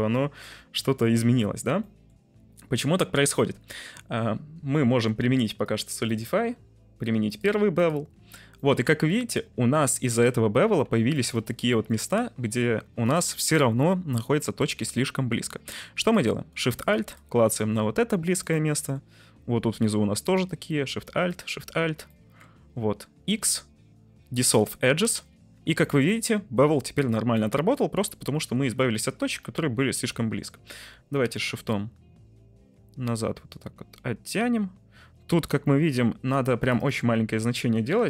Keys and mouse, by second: 1.9 middle click, 2.9 Tab, 3.6 Tab, 5.7 click, 7.2-7.9 drag, 8.1 Tab, 8.6 middle click, 9.3 2, 10.1 click, 11.3 alt+shift+click, 11.7 shift+middle click, 12.3 1, 13.0 click, 14.7 2, 16.0 middle click, 18.3 middle click, 21.3 alt+shift+click, 22.2 shift+right click, 23.2 x, 25.5 Tab, 25.9-26.6 middle drag, 27.3-27.7 middle drag, 29.6-30.4 shift+middle drag, 31.6-36.4 shift+drag, 36.6-38.0 drag, 37.9 Left.